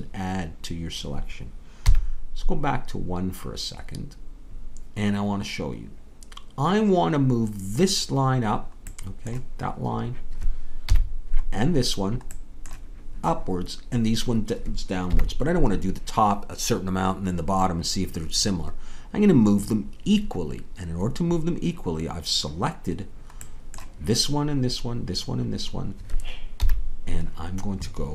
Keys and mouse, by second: 1.8 KP_1, 8.9-10.8 middle drag, 10.8 KP_1, 12.3-14.1 middle drag, 15.1 KP_1, 26.6 KP_1.